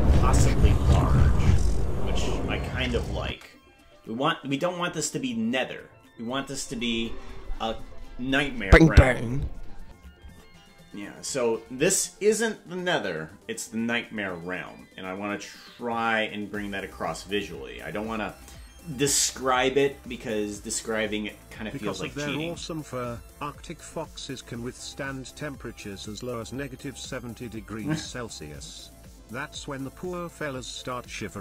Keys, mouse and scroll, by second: 3.3 space, 6.9 space.